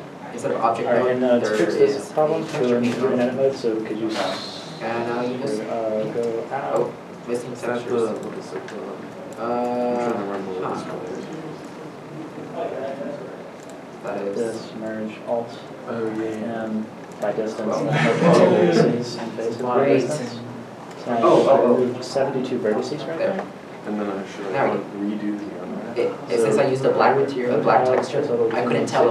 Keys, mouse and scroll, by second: 6.1 middle click, 6.1 scroll up 1, 9.2 scroll up 1, 9.4-9.7 shift+scroll, 9.7 shift+middle click, 10.1-10.4 shift+scroll, 10.4 Tab, 11.7 Tab, 12.8 shift+middle click, 13.0 Tab, 13.4 Tab, 17.3 Tab, 17.3 scroll down 1, 25.2 scroll down 1, 25.6 shift+middle click.